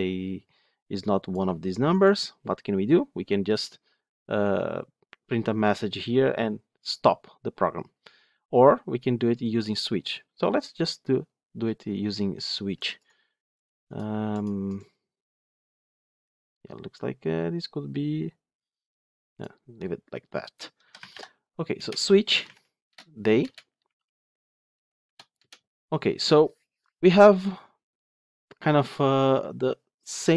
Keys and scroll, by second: 21.7 Return.